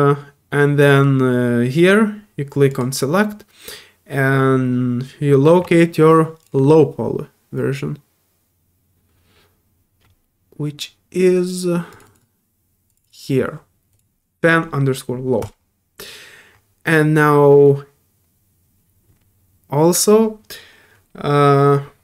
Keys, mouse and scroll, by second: 2.7 click, 6.4 click, 10.0 middle click, 11.9 click, 12.0 click, 12.9 click, 13.0 click, 13.9 click.